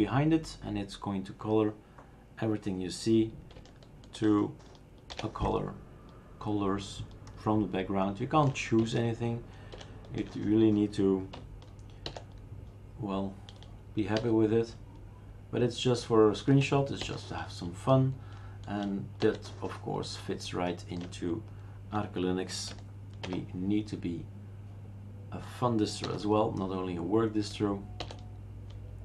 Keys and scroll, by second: 5.2 alt+shift+n, 9.7 alt+shift+u, 12.1 alt+shift+n, 14.2 alt+shift+n, 17.0 alt+shift+n, 19.3 alt+shift+n, 23.3 alt+shift+p, 26.1 alt+shift+n, 28.0 alt+shift+n.